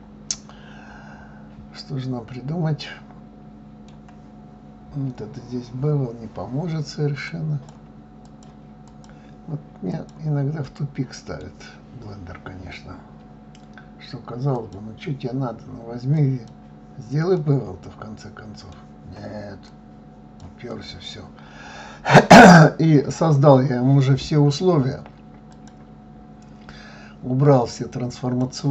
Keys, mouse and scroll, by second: 7.3-10.0 drag, 10.6-13.6 middle drag, 14.6-17.3 drag, 17.3-19.7 middle drag, 19.7-20.9 drag, 21.5 scroll up 2, 23.1 scroll up 2, 23.5-25.5 scroll down 4, 25.5-28.5 drag.